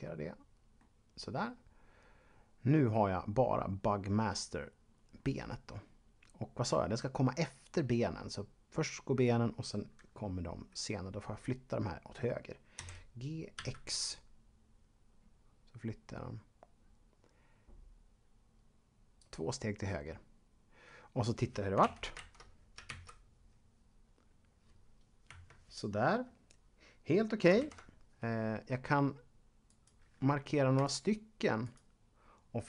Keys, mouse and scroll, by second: 1.5-3.5 scroll down 2, 4.6-5.7 scroll up 1, 5.7-6.3 scroll up 4, 12.8-14.1 typing, 19.2 click, 21.8 ctrl+Up, 22.3 Left, 22.9 alt+a, 25.3 Escape, 27.6 ctrl+Up, 29.7 right click.